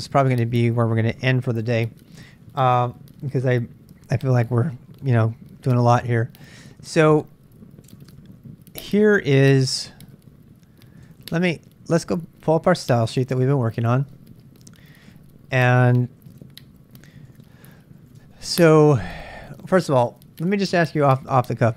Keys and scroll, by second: 5.7 super+Tab, 8.4 super+Tab, 11.1 super+Tab, 12.4-14.9 typing, 16.2 ctrl+b, 16.5 ctrl+j, 16.6 ctrl+j, 16.9 ctrl+j, 17.0-20.0 typing.